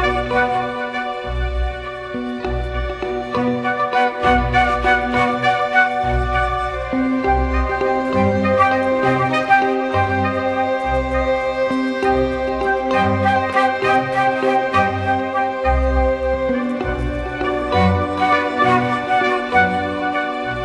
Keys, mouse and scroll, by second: 0.1-0.5 typing, 0.8 double click.